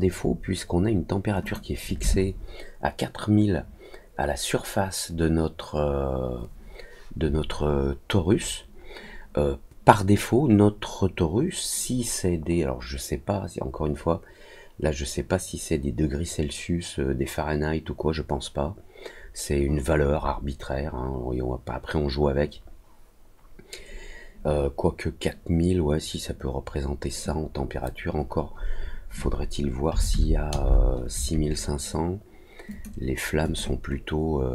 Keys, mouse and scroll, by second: 1.4 click, 32.6 click, 33.4 click.